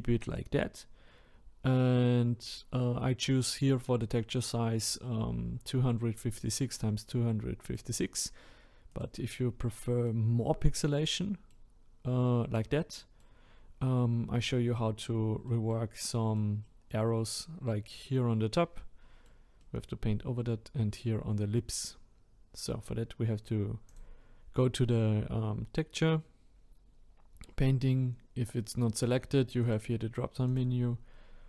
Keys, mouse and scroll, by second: 9.0 click, 9.6-13.6 middle drag, 13.6-14.3 scroll up 1, 14.3-20.0 middle drag, 20.0-23.9 scroll up 1, 23.9 click.